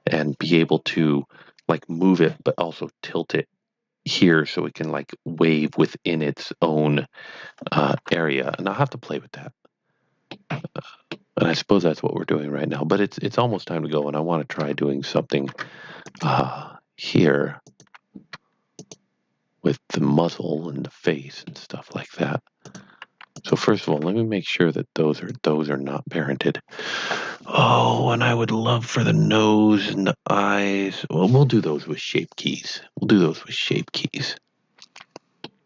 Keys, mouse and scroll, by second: 7.9 middle click, 8.0 KP_1, 10.3 middle click, 13.9 Tab, 16.1 click, 17.6 click, 20.0-20.3 scroll up 1, 20.3 middle click, 22.6 click, 23.3 click, 23.6-24.4 typing, 25.1 right click, 34.7 scroll down 1, 35.4 middle click.